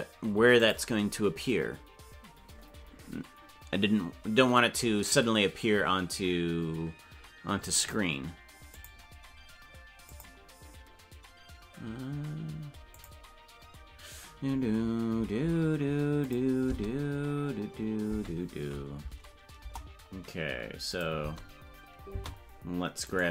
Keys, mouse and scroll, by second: 16.3 click, 16.6 space, 18.1 space, 19.1 Right, 19.5 KP_0, 20.9 click, 21.1 space, 23.1-23.3 right drag.